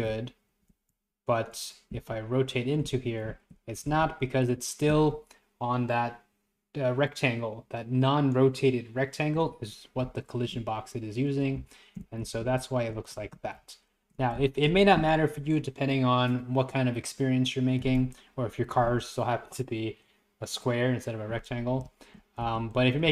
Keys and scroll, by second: 0.1 Down, 0.7 Left, 0.9 Down, 2.0 Left, 2.2 Up, 3.3 Right, 3.4 Up, 3.9 Up, 4.0 Left, 10.1 Left, 10.1 Down, 11.6 Up, 11.6 Left, 12.3 Down, 12.3 Left, 12.6 Right, 13.2 Left, 13.6 Up, 13.7 Right, 14.4 Up, 14.4 Right, 21.9 Up, 21.9 Right, 22.5 Left, 22.8 Right.